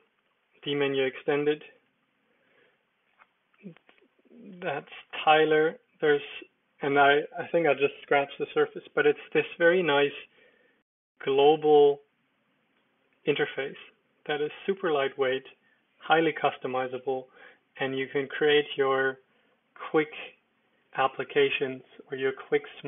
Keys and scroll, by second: 1.1 Escape, 1.7 super+d, 5.1 ctrl+super+4, 6.1 Escape, 10.3 ctrl+super+4.